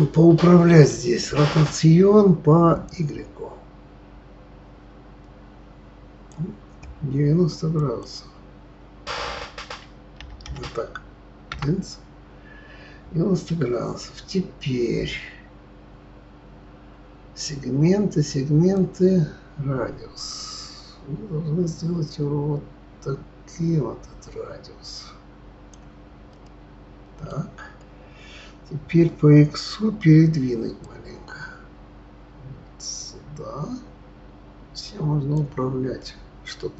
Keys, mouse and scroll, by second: 2.8-6.1 drag, 7.7-10.8 drag, 18.7-21.9 drag, 26.3-29.3 middle drag, 30.8-33.8 drag, 36.0-36.7 middle drag.